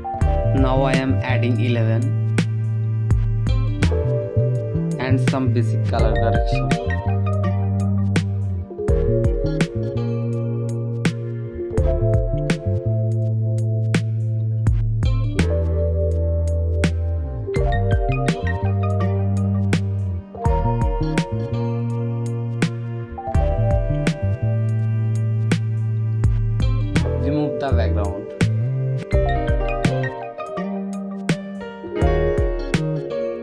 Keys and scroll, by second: 0.0-0.2 typing, 1.4 space, 14.8 space, 15.7 ctrl+s, 16.4 ctrl+z, 18.1 ctrl+Return, 18.2 space, 18.7 ctrl+j, 19.3 ctrl+t, 20.0 space, 21.1 Right, 21.6 Return, 22.0-23.3 typing, 25.4 ctrl+z.